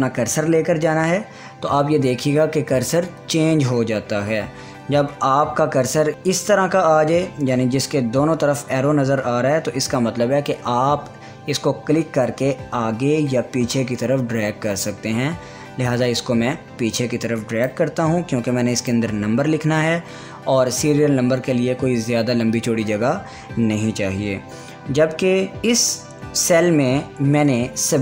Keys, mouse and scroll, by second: 11.0-19.3 drag, 25.7-28.0 drag.